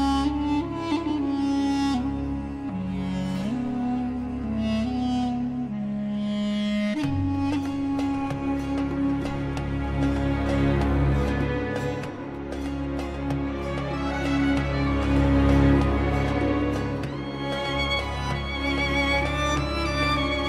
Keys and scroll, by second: 2.0 Delete, 2.6 ctrl+z, 3.3 shift+Page_Down, 3.9 ctrl+Page_Up, 5.2 F3, 7.0 shift+Page_Up, 8.0 Escape, 14.7 space, 14.9 Escape, 15.5 End.